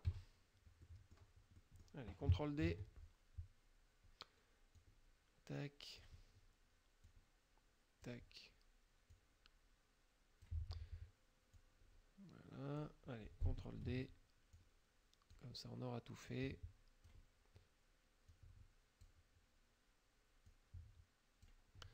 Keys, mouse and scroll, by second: 0.1 KP_Subtract, 0.9 middle click, 1.6 middle click, 2.8 ctrl+d, 4.8-6.3 drag, 7.1 click, 9.2-10.7 drag, 11.6-13.0 drag, 13.8 ctrl+d, 14.6 click, 16.4 click, 18.4 click, 20.5 click.